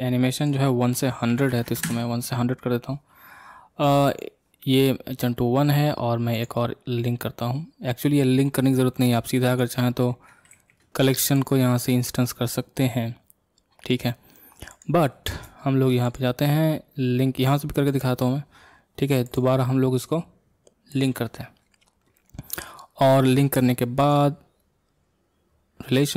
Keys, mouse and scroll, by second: 21.1 click.